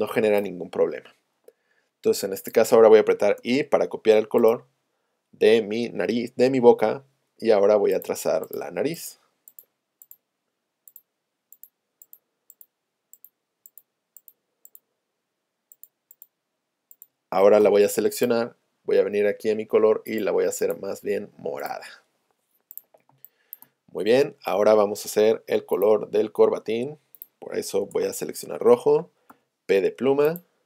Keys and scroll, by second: 3.4 i, 6.8 p, 17.6 v, 23.1 space, 27.8 Return, 29.3 p.